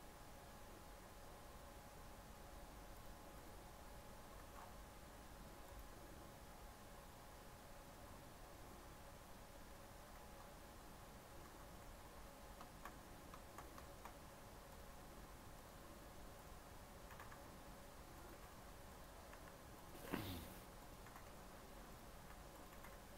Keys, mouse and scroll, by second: 3.2-4.3 drag, 4.3 ctrl+z, 5.5-8.5 drag, 9.6 middle click, 10.1 z, 10.8 scroll down 3, 11.4 ctrl+z, 11.8 ctrl+z, 12.3-13.5 scroll up 7, 12.6 shift+middle click, 13.8 shift+middle click, 14.0 scroll up 1, 14.6-17.0 drag, 17.0 s, 18.3 g, 19.2 s, 20.0 g, 21.0 g, 22.1 s, 22.7 g.